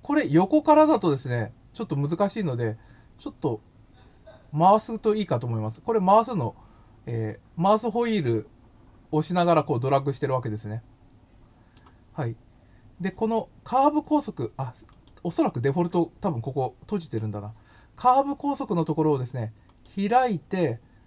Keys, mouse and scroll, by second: 5.1 middle click, 14.9 click, 15.7 click, 19.7 click.